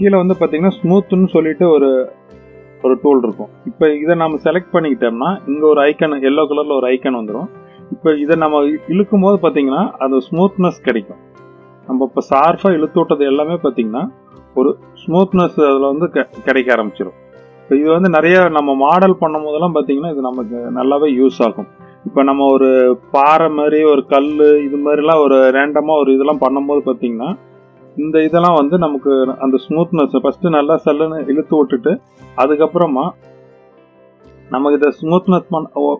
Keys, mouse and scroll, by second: 3.6 click, 7.8-11.2 drag, 11.7-13.1 middle drag, 14.6-15.9 drag, 16.9-20.7 drag, 21.0-22.1 middle drag, 22.3 middle click, 26.7-27.9 middle drag, 30.2-31.8 drag, 32.8-34.4 drag, 34.8-35.5 middle drag.